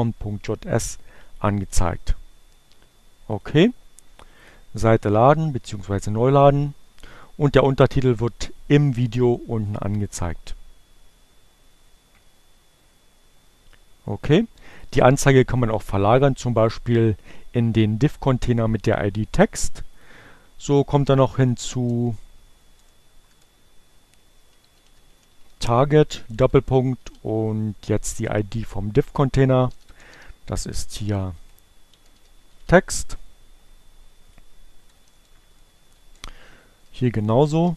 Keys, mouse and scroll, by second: 1.0 click, 3.2 click, 5.6 click, 6.7 click, 8.8 click, 19.0 click, 19.7 click, 24.4 click, 28.8-32.3 typing, 33.8-37.7 typing.